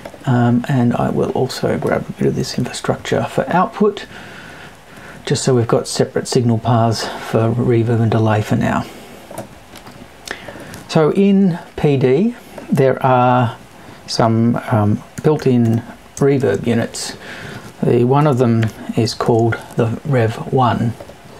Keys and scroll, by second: 18.2 BackSpace, 19.0 shift+BackSpace.